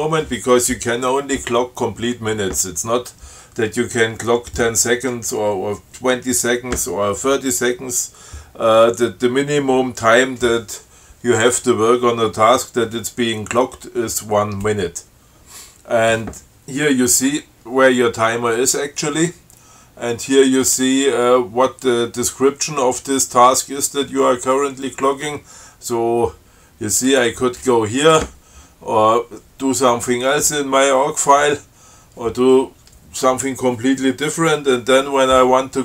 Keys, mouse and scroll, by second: 27.3 click.